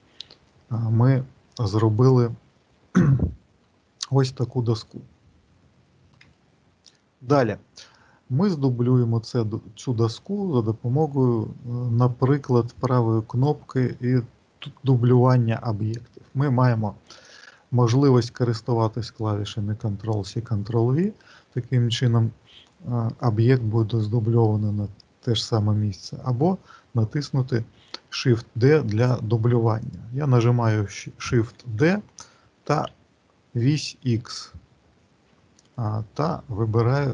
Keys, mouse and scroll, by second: 0.5 shift+middle click, 2.4 shift+middle click, 4.3 middle click, 6.4 shift+middle click, 12.5 right click, 28.9 click, 29.8 click, 31.4 shift+d.